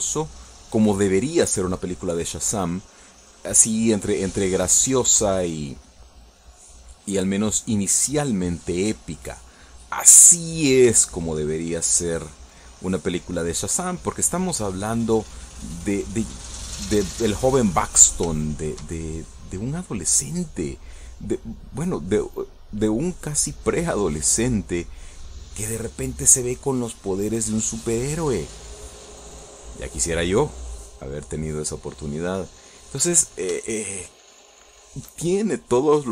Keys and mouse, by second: 2.6 middle click, 3.4-4.8 drag, 4.8 middle click, 5.9-7.2 drag, 7.2 middle click, 8.0-12.0 drag, 12.2 shift+middle click, 12.9-14.0 shift+drag, 14.0 middle click, 14.9-18.8 drag, 19.0 middle click, 19.6-20.7 shift+middle drag, 21.4 shift+middle click, 22.2-25.4 drag, 25.6-26.6 drag, 27.0 middle click, 28.1-29.4 drag, 30.9 middle click, 32.2-34.4 drag, 34.4 middle click, 34.9-36.1 shift+middle drag.